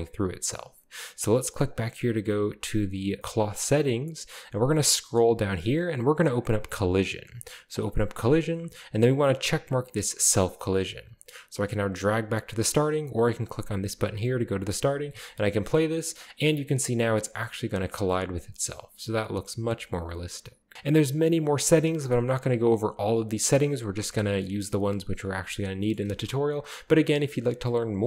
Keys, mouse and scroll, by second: 1.7 click, 4.1-6.4 scroll down 1, 6.4-7.2 drag, 6.8-8.7 scroll down 1, 10.3 click, 12.1-12.4 drag, 13.4 click, 14.8 scroll down 1, 14.9 space, 16.8-17.7 scroll up 3, 17.3 shift+middle click, 17.5 shift+middle click, 17.9-18.9 shift+scroll down 2, 19.6-20.1 middle drag, 20.7-21.2 scroll down 1, 20.7 space, 21.2-22.7 scroll up 1, 22.7-23.4 scroll down 1, 25.2 scroll down 1, 26.0 space, 26.7 drag, 27.5-28.0 scroll down 1.